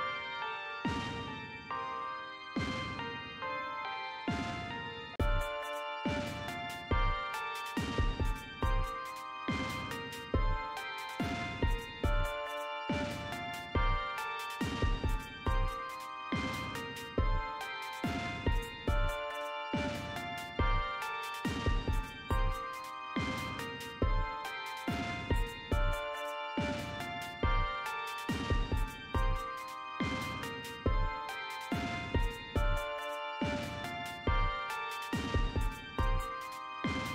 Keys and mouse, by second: 8.7 click, 16.9 click, 22.1-25.2 drag, 29.3 click, 33.1 click.